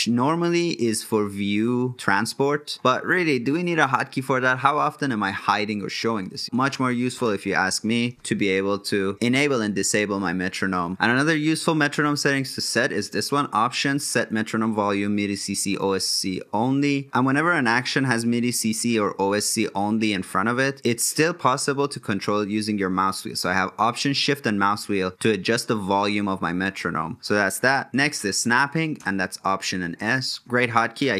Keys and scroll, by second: 27.8 alt+s.